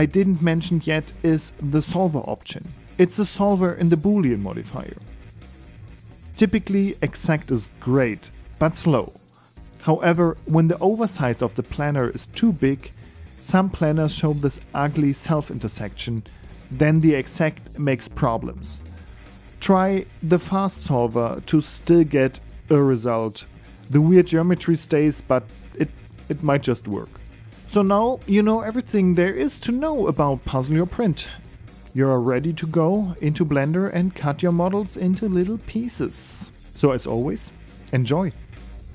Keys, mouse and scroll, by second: 2.0 right click, 3.3 click, 3.7 click, 4.6 click, 4.9 click, 5.6 right click, 6.4 middle click, 6.9 scroll down 1, 7.4 right click, 8.3 KP_7, 8.7-9.1 scroll up 5, 9.1 shift+middle click, 9.8-10.2 scroll up 2, 11.5 click, 15.9 click, 16.6-17.6 scroll down 6, 17.6 scroll down 3, 17.9 ctrl+z.